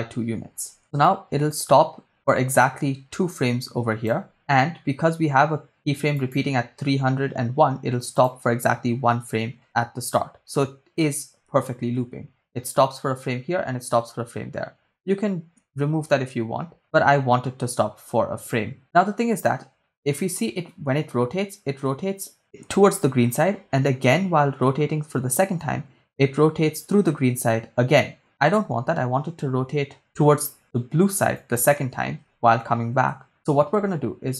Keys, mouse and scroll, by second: 0.0 Return, 0.8 shift+space, 0.9 shift+space, 1.2-4.3 drag, 6.3 click, 8.4 click, 9.6 Right, 12.0 shift+space, 28.5 shift+space, 31.6 click, 33.3 Right.